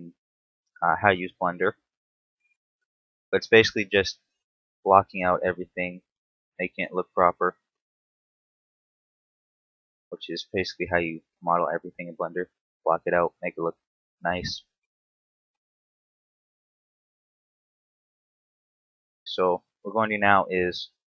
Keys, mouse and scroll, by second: 1.3 ctrl+click, 1.8 g, 4.1 ctrl+click, 4.5 s, 5.6 ctrl+click, 6.5-7.2 scroll up 2, 7.8 click, 10.1 click, 11.3 s, 12.8 ctrl+click, 13.3 click, 14.7 shift+d, 16.3 ctrl+click, 17.4 ctrl+z, 17.9 scroll up 3, 18.5 shift+middle click, 18.8 middle click, 20.0 alt+right click.